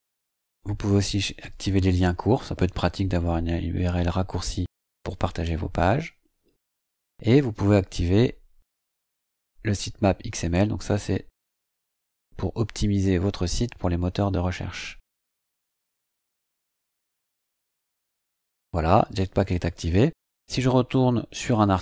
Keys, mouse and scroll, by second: 1.4 click, 6.4-6.8 scroll up 2, 6.9-8.7 scroll down 3, 8.7 click, 9.0-9.5 scroll down 2, 15.4-15.7 scroll up 2, 16.1-18.1 scroll up 8.